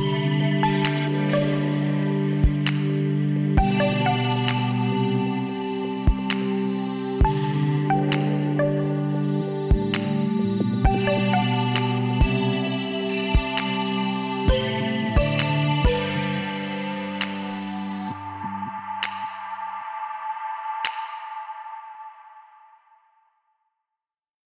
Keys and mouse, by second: 0.2-2.4 middle drag, 1.1 z, 1.8 b, 5.2 b, 7.3 ctrl+i, 8.5 h, 9.0 middle click, 10.0 z, 11.2 KP_1, 12.7 click, 13.5 l, 14.4 g, 15.6 z, 17.3-20.2 drag, 19.0 x, 20.7-22.5 drag, 21.4 l, 22.1 z, 23.3 click.